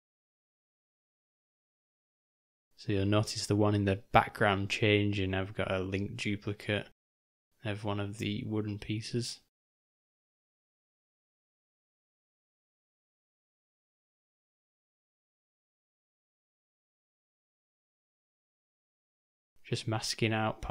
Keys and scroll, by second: 3.7 3, 5.3 ], 5.4 ], 5.6 ], 5.7 ], 9.3-10.9 typing, 13.0 m, 15.8 shift+/, 16.7 g.